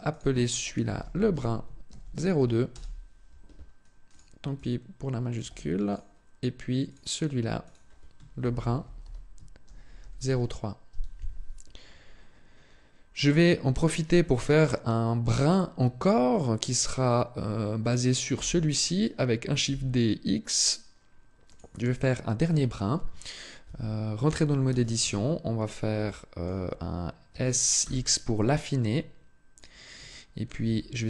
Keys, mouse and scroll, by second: 3.9 click, 6.7 click, 7.4 click, 13.0 right click, 14.5 scroll down 1, 18.1 shift+d, 21.3 click, 23.4 Tab, 24.5 a, 24.8 a, 25.5-25.9 scroll down 1, 25.9 shift+middle click, 27.1 s, 29.4 click, 29.9 shift+middle click, 30.5 a.